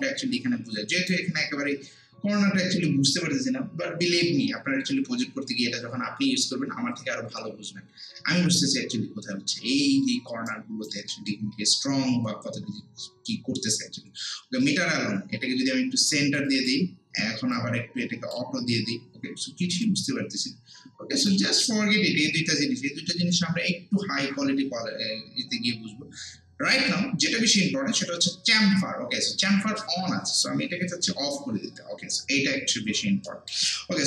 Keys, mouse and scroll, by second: 8.3 scroll down 1, 8.7 scroll up 1, 9.9 alt+middle click, 10.5 alt+right click, 11.4 alt+middle click, 14.9-30.4 drag, 32.6 scroll down 1, 33.3 alt+middle click, 33.8 alt+right click.